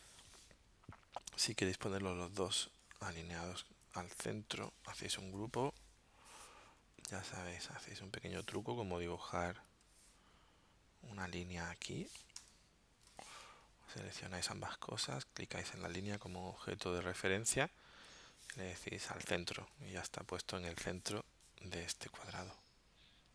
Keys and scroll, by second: 5.2 super+g, 12.3 d, 13.1 v.